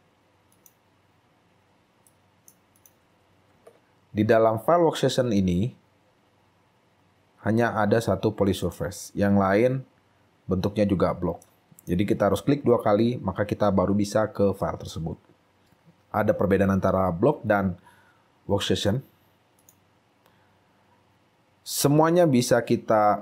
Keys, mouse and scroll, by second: 2.2 right click, 3.7 ctrl+a, 3.7 scroll up 6, 5.3 scroll down 2, 10.8-11.3 scroll down 8, 11.5 shift+right click, 12.2 shift+scroll up 3, 15.6 double click.